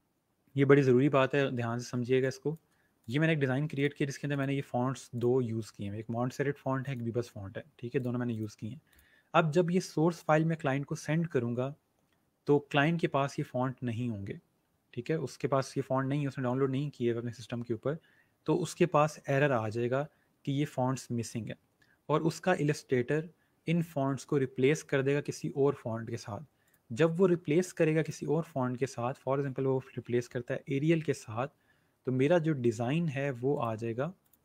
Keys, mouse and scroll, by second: 1.9 space, 2.1 click, 2.8 space, 2.9 click, 26.6 click, 30.1-30.9 typing, 33.4 click.